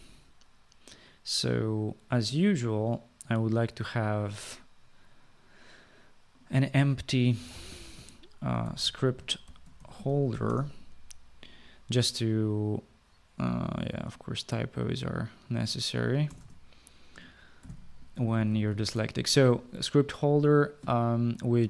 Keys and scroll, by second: 7.3-10.9 typing, 16.3-18.8 typing.